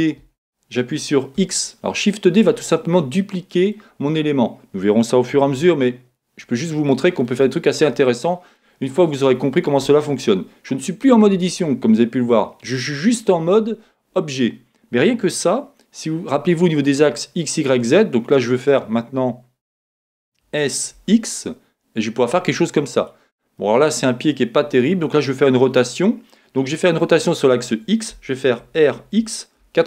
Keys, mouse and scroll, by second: 2.1 middle click, 3.3-23.4 middle drag, 20.4 s, 23.7-29.8 middle drag, 28.6 r.